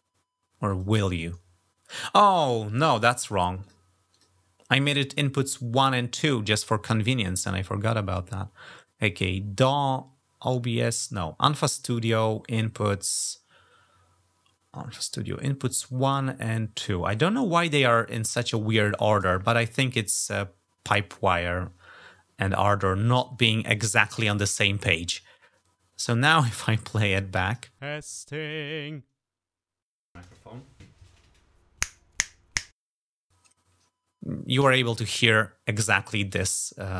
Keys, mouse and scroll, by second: 0.5 click, 3.4 click, 3.9 click, 5.5 click, 6.8 scroll up 2, 12.8 scroll up 2, 15.4 click, 16.6 click, 26.3 click, 27.2 click, 27.6 -, 36.0-36.9 drag.